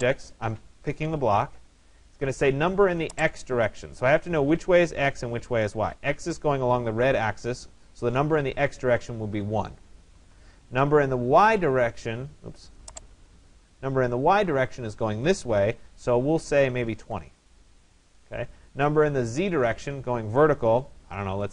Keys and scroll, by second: 9.8 Return, 16.8-17.7 typing, 18.0 Return.